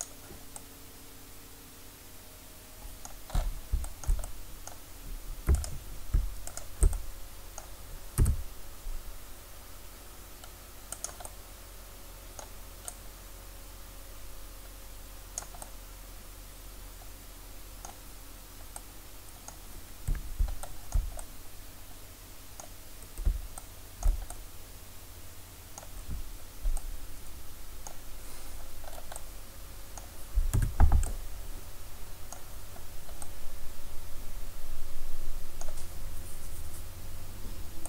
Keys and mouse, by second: 1.6-5.7 middle drag, 5.7-8.2 right drag, 8.2 s, 11.1-15.4 drag, 15.9-29.2 middle drag, 29.2-30.6 drag, 30.6 Tab.